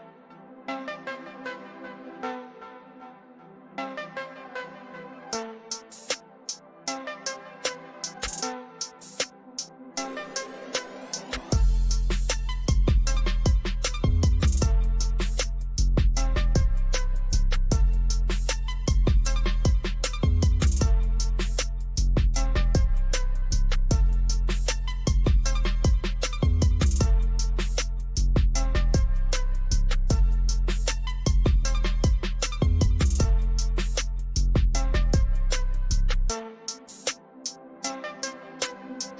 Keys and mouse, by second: 0.7-5.9 drag, 7.9-11.4 drag, 11.4 ctrl+-, 13.0 ctrl+=, 13.9 ctrl+t, 15.5-20.2 drag, 22.2 ctrl+-, 25.4 ctrl+shift+r, 25.5 click, 32.7 click.